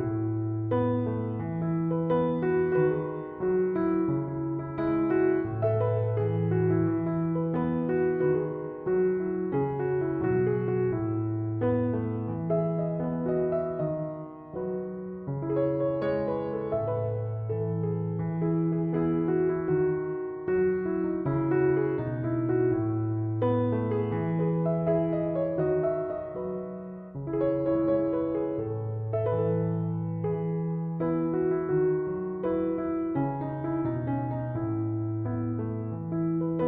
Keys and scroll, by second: 4.9 3, 5.2 Return, 24.5-26.4 typing.